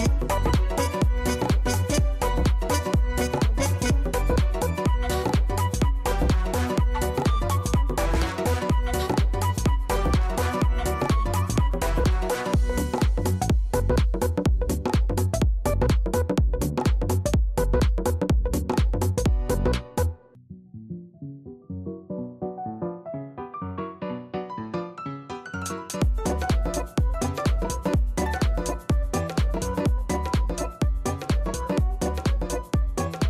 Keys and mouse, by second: 0.7-3.6 alt+drag, 3.7 alt+right click, 4.3 alt+middle click, 6.1 KP_0, 6.2 KP_1, 6.9 alt+right click, 7.0-9.4 alt+drag, 10.2 click, 12.1 click, 13.8 click, 16.5 right click, 18.2 click, 19.1 click, 19.7 click, 21.1 click, 21.6 click, 21.8 right click, 26.3 click, 28.7 click, 29.6 click, 30.1 click.